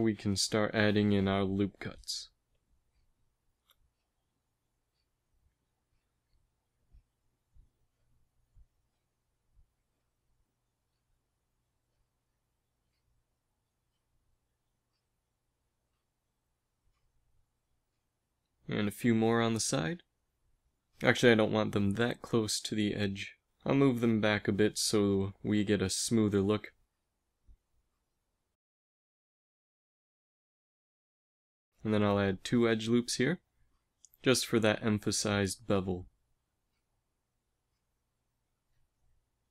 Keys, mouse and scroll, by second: 0.0 ctrl+n, 2.3 ctrl+r, 8.0 ctrl+z, 10.5 KP_7, 12.4 ctrl+r, 14.9 ctrl+r, 19.5 ctrl+r, 22.6 ctrl+r, 25.7 a, 28.9 KP_1, 32.8 ctrl+r, 35.1 a.